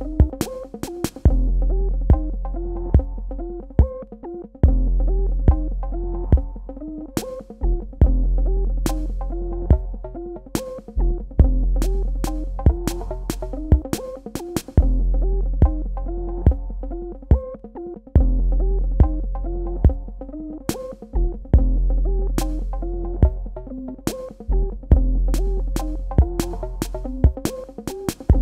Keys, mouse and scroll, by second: 0.3 g, 0.8 click, 4.8 v, 5.0 click, 11.3-12.3 typing, 13.7 Tab, 14.2 super+KP_Add, 16.5 super+KP_Subtract, 18.0 click, 22.9-24.8 typing, 25.0 Tab, 26.2 super+KP_Add.